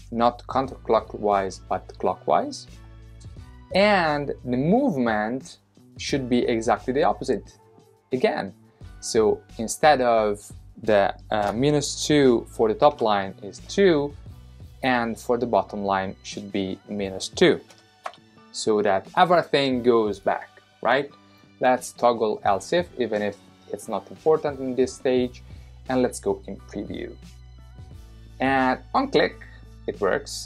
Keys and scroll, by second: 12.9 2, 17.7 -, 18.0 2.